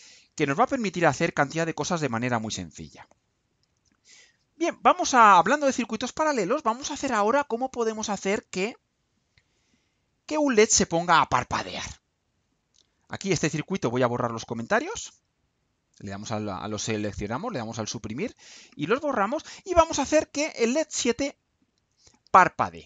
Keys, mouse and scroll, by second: 13.7 click, 14.9 Delete, 15.8 click, 17.0 Delete.